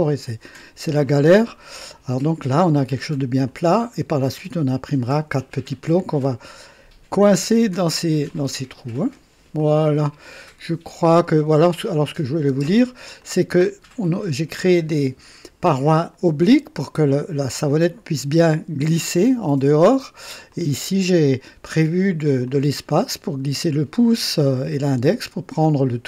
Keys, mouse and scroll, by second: 1.0-1.9 drag, 3.5-4.2 drag, 8.3 click, 9.6-11.8 drag, 12.5 space, 13.2-15.0 drag, 16.8-17.4 drag, 19.3-20.3 drag, 20.5-21.3 drag, 22.5 click.